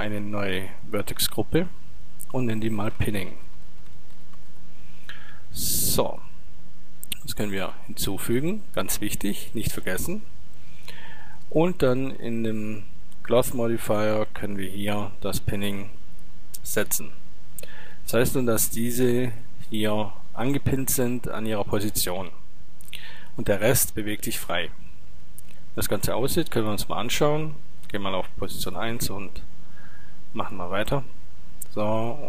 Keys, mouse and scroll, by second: 0.8-4.1 drag, 7.2-9.1 drag, 11.5-13.4 drag, 15.3-18.4 drag, 25.2 Tab, 27.8-30.7 drag.